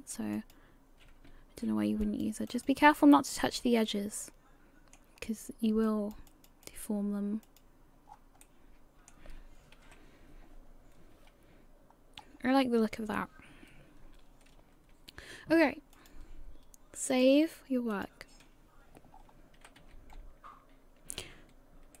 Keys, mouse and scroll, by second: 16.0 click, 17.1 click, 19.2-19.6 scroll down 3, 19.6 a, 19.8 a, 20.4-21.1 scroll down 2, 21.1-22.0 scroll up 2.